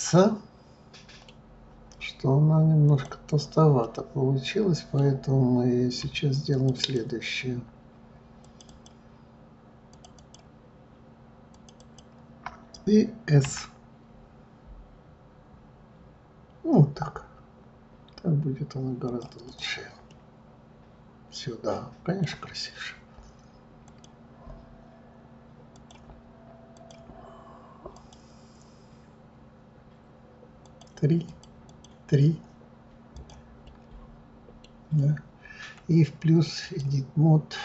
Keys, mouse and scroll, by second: 2.8 click, 3.8-6.5 middle drag, 6.5 shift+click, 6.7 shift+click, 8.4 shift+click, 8.6 shift+click, 9.9 shift+click, 10.1 shift+click, 11.5 shift+click, 11.7 shift+click, 13.4 s, 19.4 click, 20.1-23.1 middle drag, 23.8 click, 25.7 click, 26.7-29.7 drag, 30.6 click, 31.2 click, 33.1 click, 33.6-36.6 middle drag, 36.6 click.